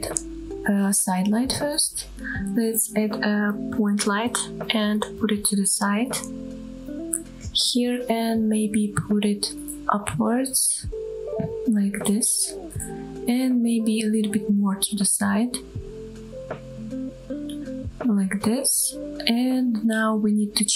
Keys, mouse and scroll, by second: 1.1 shift+a, 3.9-4.2 scroll up 1, 4.2-4.7 middle drag, 5.1 KP_7, 6.3 g, 8.0 click, 8.5-9.2 middle drag, 9.4 g, 9.9 z, 12.4 click, 13.1-13.5 middle drag, 13.8 KP_7, 14.9 g, 17.6 click, 18.1-18.4 scroll up 2, 18.4-19.0 middle drag, 20.5 scroll up 2.